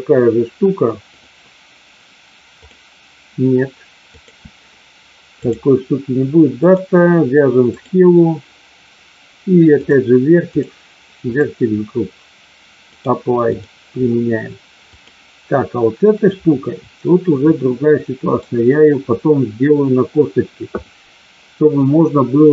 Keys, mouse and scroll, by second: 1.0 click, 4.1-5.5 drag, 11.2 click, 12.9 click, 14.9 click, 16.1-18.5 middle drag.